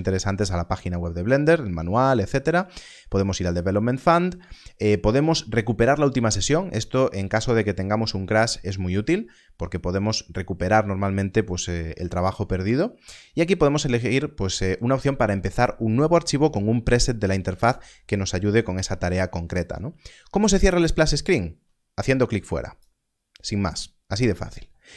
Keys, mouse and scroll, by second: 22.7 click.